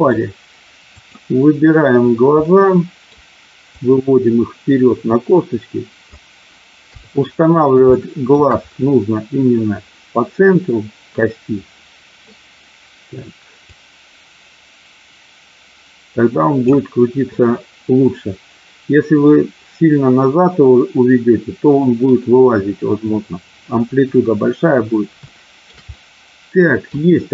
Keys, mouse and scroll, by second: 0.9 click, 2.4 middle click, 3.7-6.0 drag, 6.9 KP_3, 7.9 shift+middle click, 13.7-16.7 drag, 24.0 KP_1, 25.1 shift+middle click, 25.9-26.9 middle drag.